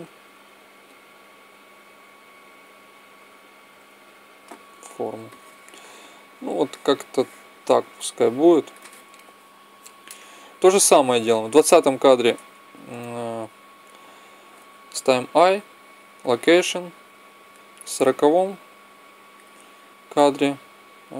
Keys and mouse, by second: 0.6 right click, 0.8 click, 0.9 middle click, 1.7 click, 1.7 right click, 5.1 middle click, 6.1-7.1 middle drag, 12.2 Tab, 14.8 |, 17.4-19.2 drag.